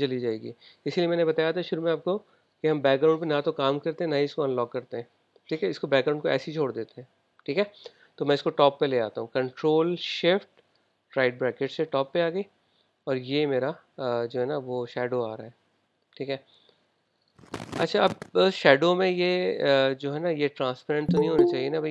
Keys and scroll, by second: 11.6 shift+super+].